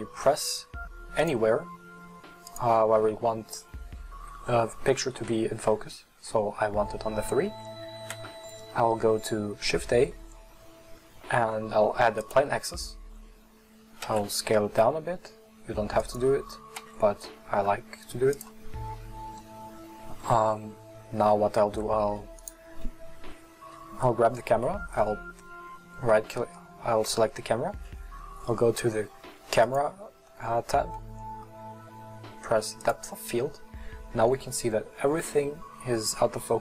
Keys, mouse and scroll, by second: 1.2-2.6 drag, 14.1 s, 16.8 s, 22.4 right click, 29.6-32.9 drag.